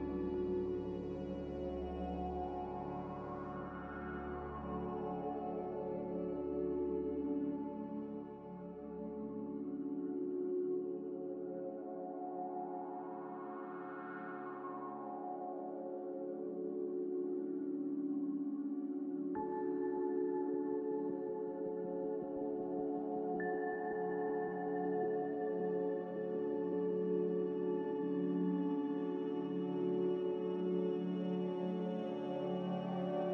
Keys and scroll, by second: 17.4 z.